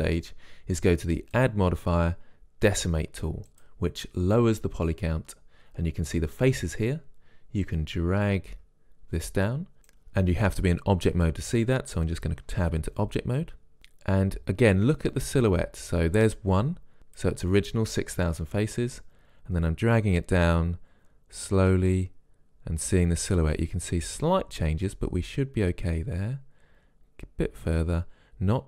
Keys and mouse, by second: 1.6-3.5 drag, 7.9-9.9 drag, 12.8 Tab, 14.0-16.0 drag, 19.1-21.0 drag.